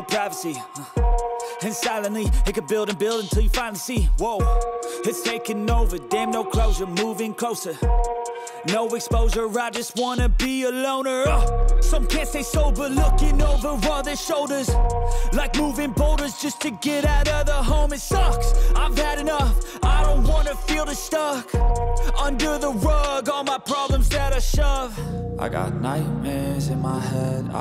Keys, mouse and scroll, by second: 0.1 scroll up 1, 1.1 click, 5.3 click, 6.3 shift+middle click, 8.0 click, 8.7 click, 11.2 click, 12.1 alt+right click, 13.6 middle click, 14.4 click, 14.4 g, 19.8 middle click, 20.5 g, 27.1-27.6 middle drag.